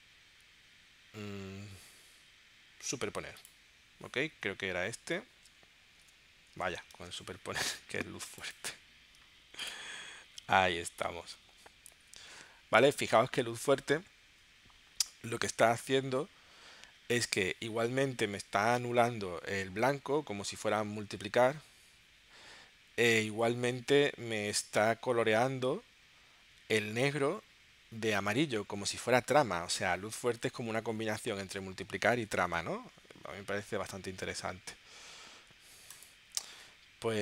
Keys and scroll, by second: 4.8 super+Tab, 6.0 space, 6.6 space, 6.9 super+Tab.